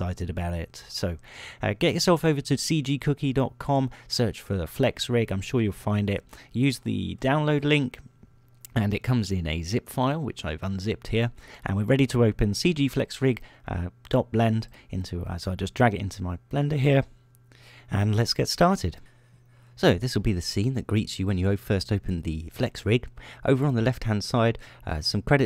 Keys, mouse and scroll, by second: 7.0-8.0 scroll down 6, 10.2 middle click, 14.8 ○.